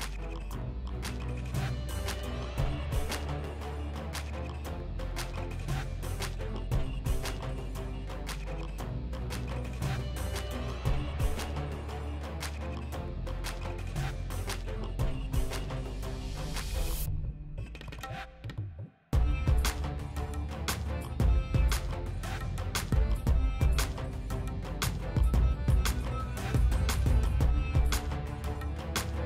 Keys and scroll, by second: 0.0-1.6 typing, 2.4 ctrl+c, 3.2 ctrl+v, 3.8 ctrl+v, 4.2 ctrl+v, 4.7 ctrl+v, 5.3 ctrl+v, 5.7 ctrl+v, 11.5-12.6 typing.